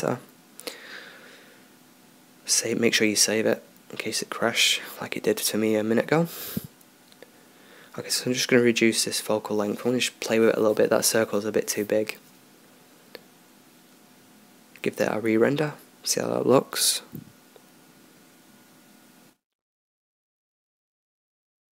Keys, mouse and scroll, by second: 1.9 ctrl+s, 5.3 right click, 19.5 Escape, 21.1 shift+a.